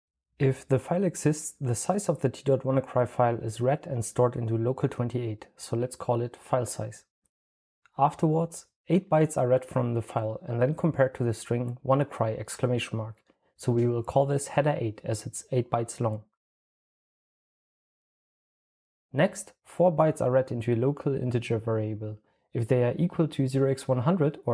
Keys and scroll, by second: 0.0-0.2 typing, 4.5-6.1 typing, 11.1-12.4 typing, 13.7-14.7 typing, 16.1-17.1 typing, 20.8-22.5 typing.